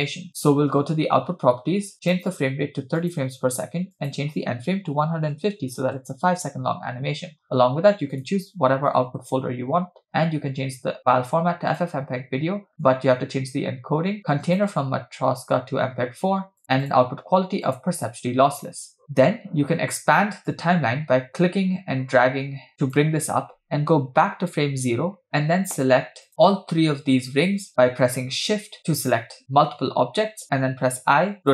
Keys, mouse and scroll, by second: 2.1-3.3 drag, 4.0-6.0 drag, 6.9-7.5 scroll down 3, 8.1-9.3 drag, 9.0 /, 10.1-11.9 drag, 12.3-12.7 scroll down 3, 12.9 click, 13.0-13.3 scroll down 2, 14.5-16.6 drag, 16.9-17.8 drag, 19.0-20.5 scroll up 7, 20.5-23.0 drag, 24.2 Left, 26.3-27.5 drag.